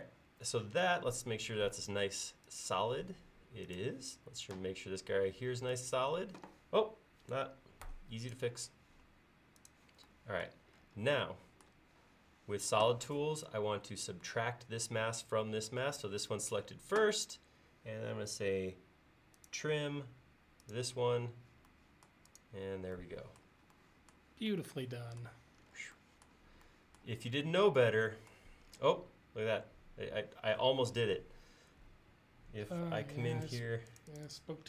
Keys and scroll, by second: 33.5 space.